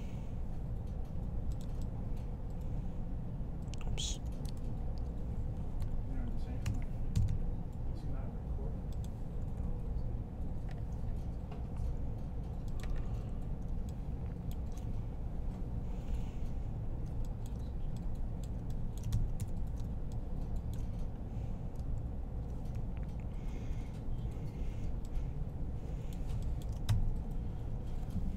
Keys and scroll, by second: 4.4 super+z, 5.6-7.1 typing, 8.9-9.7 typing, 19.2 3.